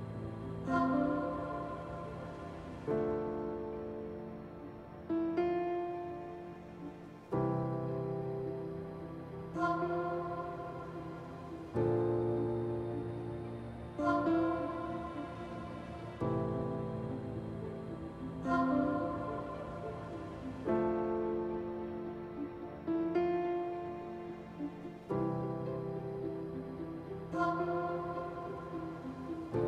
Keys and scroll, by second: 1.8 ctrl+z, 15.7 ctrl+z, 25.9 ctrl+z.